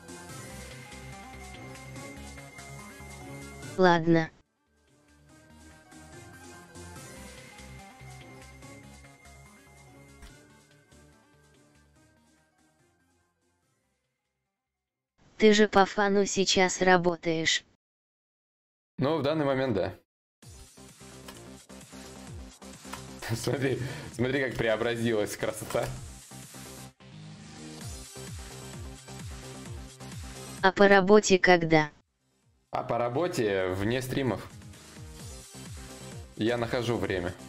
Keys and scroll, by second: 11.4 Return, 12.8 Return, 15.8 Return, 16.9 Return, 18.3 Return.